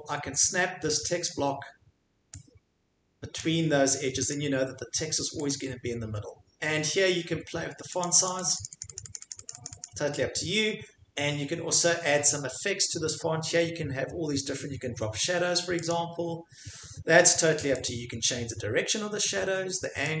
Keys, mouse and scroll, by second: 1.2 click, 3.4 click, 4.7 click, 5.5 click, 8.0 click, 8.2 click, 8.5 click, 8.6 click, 8.8 click, 9.0 click, 9.1 click, 9.3 click, 9.5 click, 9.6 click, 9.8 click, 15.9 click, 17.8 click, 19.1 scroll down 2.